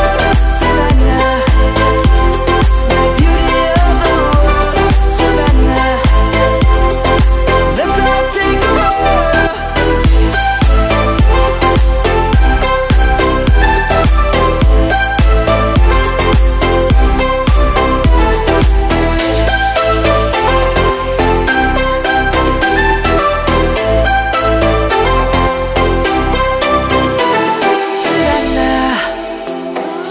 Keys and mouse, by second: 0.8 click, 5.7 click, 6.5 middle click, 7.0 click, 7.2 Tab, 8.4 click, 9.1 a, 10.0 shift+click, 11.2 shift+click, 13.9 click, 16.9 Tab, 17.5 click, 18.3 middle click, 20.7 click, 21.0 Tab, 21.3 click, 29.5 Tab, 29.9 click.